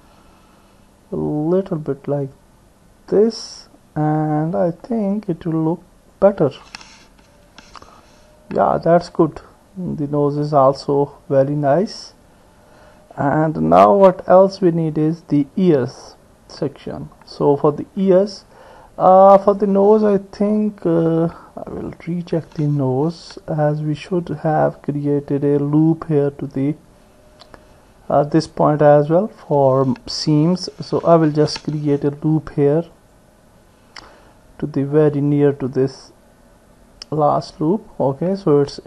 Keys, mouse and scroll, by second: 4.2 click, 7.4 Tab, 7.9-9.1 middle drag, 10.4-14.3 middle drag, 15.9-17.8 middle drag, 21.8 click, 23.1 Tab, 24.1 middle click, 26.0 click, 27.5 middle click, 31.0 ctrl+r.